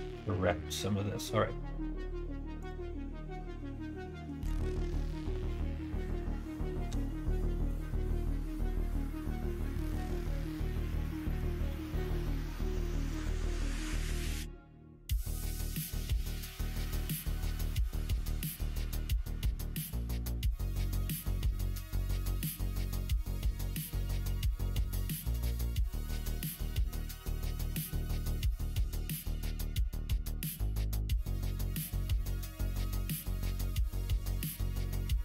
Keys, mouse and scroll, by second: 4.4-8.5 drag, 8.8 click, 9.6-11.3 middle drag, 11.7 shift+middle click, 13.2 middle click, 13.7 middle click, 18.9-24.2 drag, 25.2-27.6 drag, 27.9-29.7 middle drag, 30.2 middle click, 31.0 middle click, 31.4 middle click, 31.6 middle click, 32.0 shift+middle click, 32.3 middle click, 32.8 middle click, 33.1 middle click, 33.5 middle click, 34.0 middle click, 34.4 shift+middle click, 34.9 middle click.